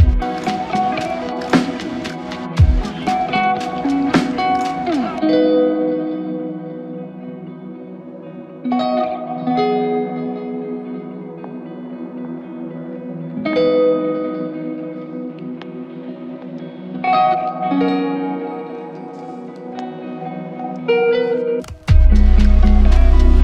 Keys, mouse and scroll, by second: 5.5 ctrl+shift+click, 6.9 ctrl+shift+click, 8.0 ctrl+shift+click, 14.5 ctrl+shift+click, 16.0 ctrl+z, 16.5 ctrl+z, 16.9 ctrl+z, 17.3 ctrl+z, 19.4 ctrl+shift+click.